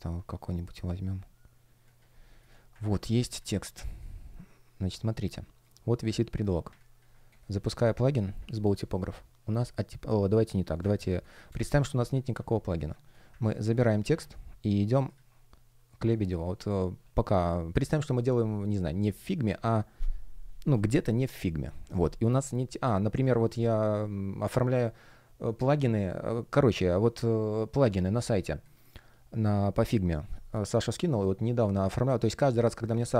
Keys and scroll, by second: 7.2 space, 11.0 space, 12.6 space, 13.9 super+c.